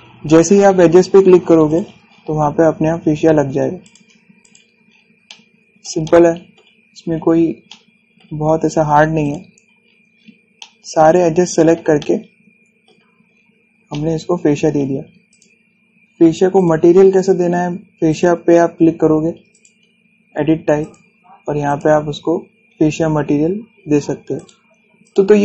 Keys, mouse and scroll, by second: 1.4 scroll up 1, 2.4 click, 2.7 scroll down 1, 4.0-4.5 scroll up 1, 4.5 click, 5.5 scroll down 1, 5.9-7.6 shift+middle drag, 7.6 scroll up 1, 8.4 shift+middle click, 9.4 scroll up 1, 9.9 click, 10.4 scroll down 1, 11.2-13.9 shift+middle drag, 13.9 scroll down 1, 14.6-15.9 shift+middle drag, 15.9 click, 17.8 scroll up 1, 18.7 click, 25.0 click.